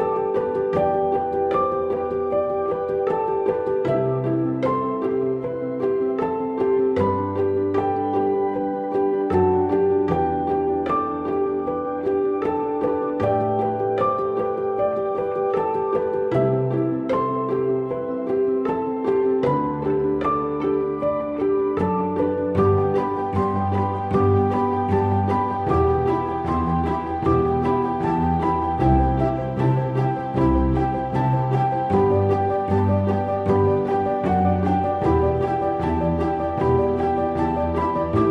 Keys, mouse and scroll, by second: 17.0-17.3 scroll up 1.